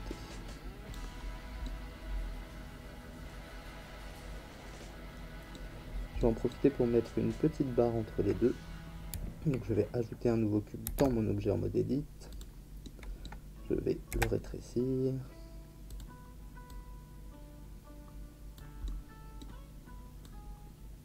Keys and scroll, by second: 10.8 shift+a, 14.1 s.